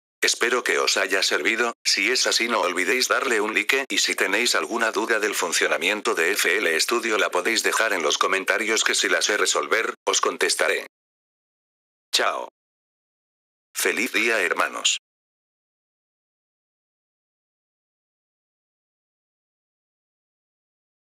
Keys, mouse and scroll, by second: 21.1 click.